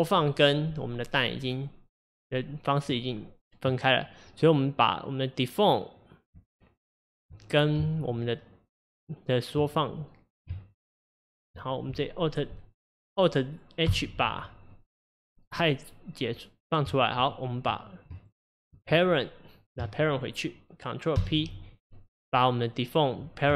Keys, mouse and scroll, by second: 7.9 Tab, 10.6 Tab, 13.9 alt+h, 17.3 shift+click, 18.2 shift+click, 22.2 ctrl+p.